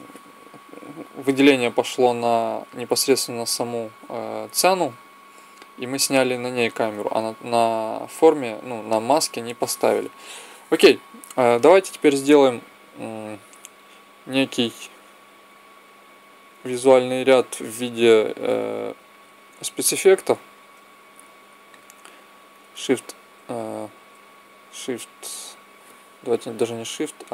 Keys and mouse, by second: 13.5 click, 15.4-17.0 middle drag, 17.0-18.8 drag, 19.7-21.5 drag, 23.1 click, 26.4 click.